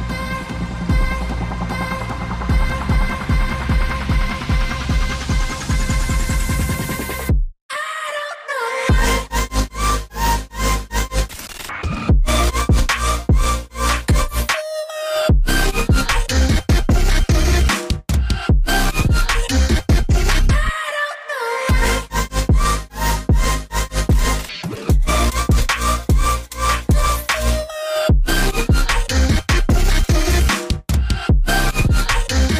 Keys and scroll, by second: 19.7 ctrl+x, 21.7 ctrl+f.